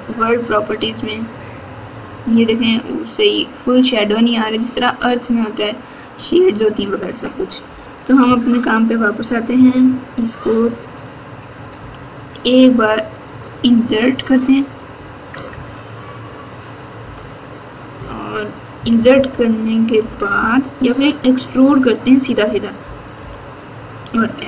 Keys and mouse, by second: 8.2 Tab, 11.7 KP_2, 15.3 KP_Add, 15.5 KP_Add, 17.0 KP_Multiply, 17.0 KP_Multiply, 17.9-20.3 typing, 23.1 KP_7.